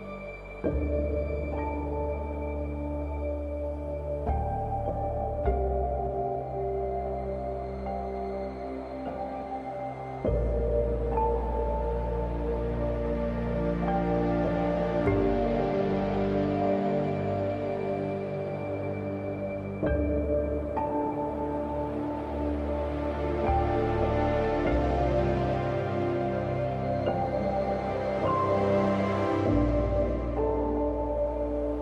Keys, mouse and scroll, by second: 1.5 click, 1.9 scroll down 1, 3.1 scroll up 1, 4.1 click, 5.6-6.2 scroll down 1, 6.2 scroll up 1, 7.5-8.1 scroll down 2, 8.6 scroll up 1, 10.3 scroll down 1, 11.6 scroll up 1, 14.1 scroll down 1, 15.0-16.6 scroll up 1, 16.6 click, 18.3 scroll down 1, 19.8-21.6 scroll up 1, 22.1 scroll up 1, 25.9 click, 26.6 ctrl+alt+shift+e, 27.7 ctrl+shift+a, 31.6 ctrl+shift+a, 31.6 click, 31.7 space.